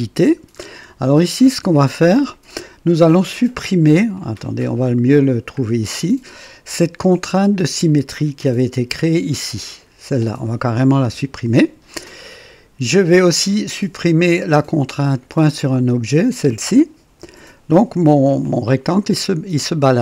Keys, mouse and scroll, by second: 0.5-0.9 scroll up 1, 1.2 right click, 2.0-2.7 right drag, 4.1-5.0 drag, 5.2-5.5 scroll down 1, 9.7 click, 11.0 Delete, 15.7 click, 17.2 Delete, 18.4-20.0 drag.